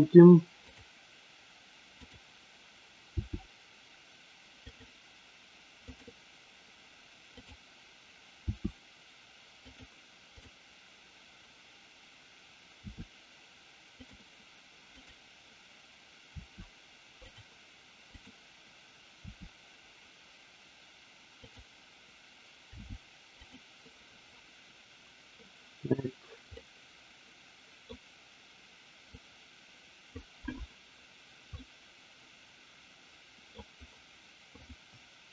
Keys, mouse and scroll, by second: 0.6-1.2 drag, 3.1 r, 4.7 click, 5.8 click, 7.3 click, 8.4 r, 9.6 click, 12.7 r, 14.0 click, 14.9 click, 16.3 r, 17.2 click, 18.2 click, 19.2 r, 21.5 click, 22.6 g, 26.6-27.8 middle drag, 29.1-30.2 drag, 31.6-33.5 middle drag, 34.6 click.